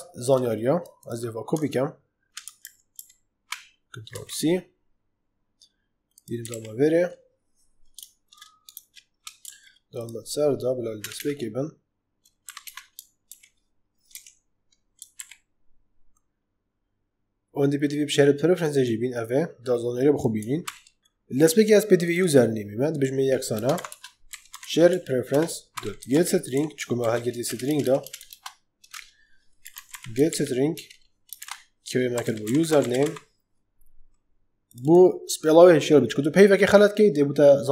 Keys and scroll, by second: 2.3 alt+shift+Right, 4.0 ctrl+c, 6.4 ctrl+v, 9.3 ctrl+z, 10.9 Return, 12.4 Up, 12.6 Return, 13.2 alt+v, 14.0 Escape, 15.1 ctrl+v, 20.5 ctrl+c, 23.5-30.2 typing, 25.2 Return, 30.6 Return, 31.3-33.4 typing.